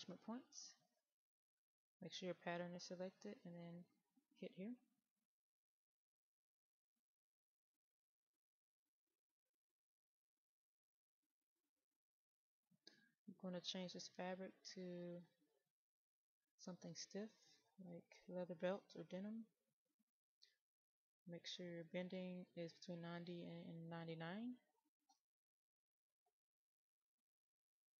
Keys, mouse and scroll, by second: 5.4 right click, 6.7 click, 7.1-7.7 scroll up 1, 7.7-17.0 drag, 26.8 KP_9, 27.5-28.0 scroll up 1.